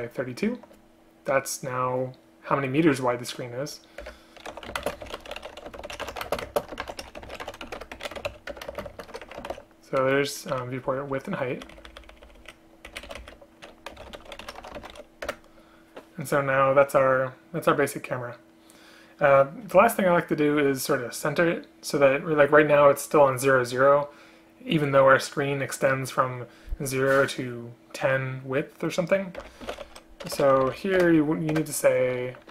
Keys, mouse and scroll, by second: 4.1 Return, 4.9 space, 6.5 space, 7.8 Return, 8.6 Return, 8.8 space, 8.9 space, 10.6 Down, 10.9 Left, 11.2 Left, 13.1 shift+End, 13.2 shift+Left, 15.3 Return, 30.3 BackSpace, 30.4 BackSpace, 31.1 Return, 31.6 Return.